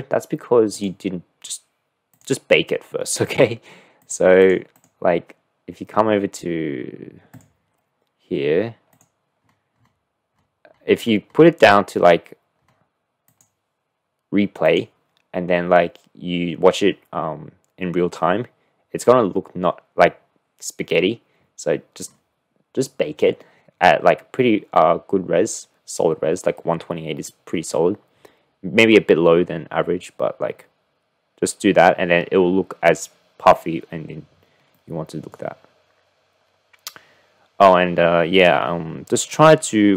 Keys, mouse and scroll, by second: 4.4 click, 4.8 click, 7.3 drag, 13.4 click, 34.7-35.4 drag.